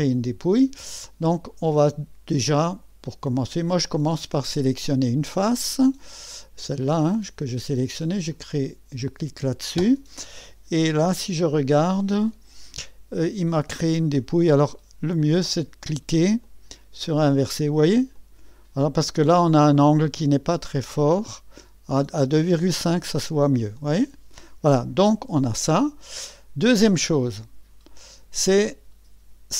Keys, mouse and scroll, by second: 1.3-5.4 drag, 8.3 click, 8.7 click, 10.2 click, 11.0 KP_1, 12.3 KP_3, 15.2 click, 15.2 typing, 17.4-22.4 drag, 22.9-27.8 drag.